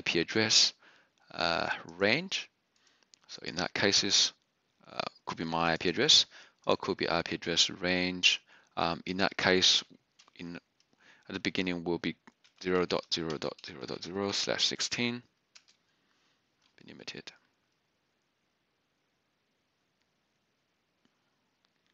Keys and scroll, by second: 12.0-16.2 typing.